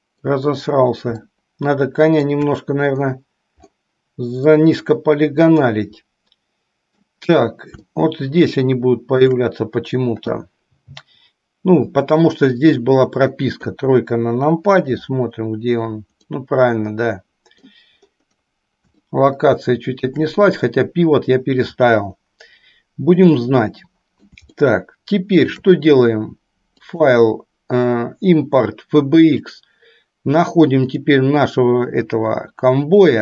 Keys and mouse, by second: 1.8-2.6 shift+middle drag, 4.8-7.3 middle drag, 8.0-9.6 shift+middle drag, 13.6 KP_3, 16.9 middle click, 19.4 shift+middle click, 23.5-26.0 middle drag, 27.2-29.9 drag.